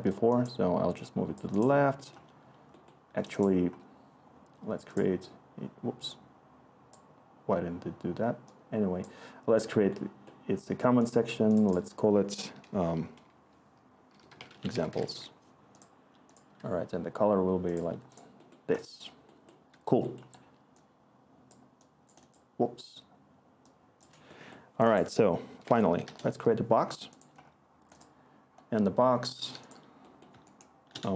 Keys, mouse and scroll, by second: 13.8-17.9 typing, 25.6-26.5 typing, 29.5-31.1 r.